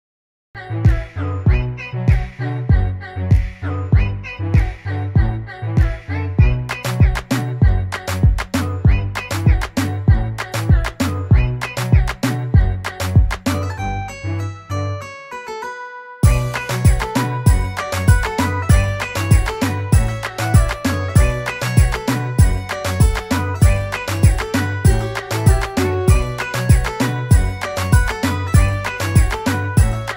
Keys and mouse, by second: 0.0-5.1 typing, 7.5 click, 8.2 click, 12.4 click, 14.1 click, 17.5 click, 17.9 double click, 18.1 click, 18.6 double click, 18.8 click, 22.7 click, 23.1 double click, 24.6 double click, 24.7 click, 27.3 click, 29.1-29.9 click, 29.7 click.